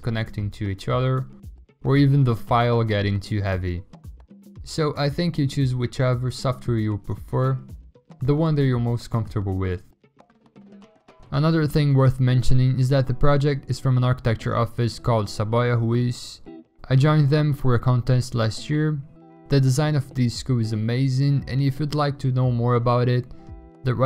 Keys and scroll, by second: 0.7 v, 2.3 ctrl+i, 3.2 ctrl+i, 5.8 ctrl+z, 6.3-7.6 typing, 9.6-10.4 typing, 13.2 x, 15.6 alt+BackSpace, 16.3 ctrl+d.